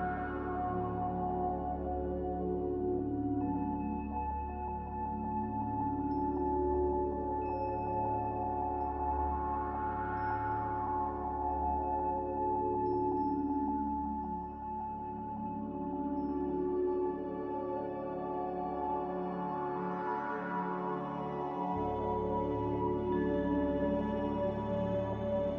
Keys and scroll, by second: 1.7 ctrl+z, 2.8 z, 6.1 a, 6.7 f, 23.1 n, 23.7 z.